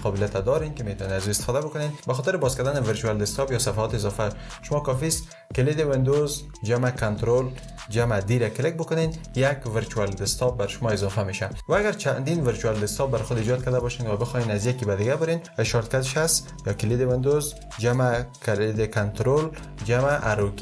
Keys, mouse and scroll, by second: 7.6 ctrl+super+d.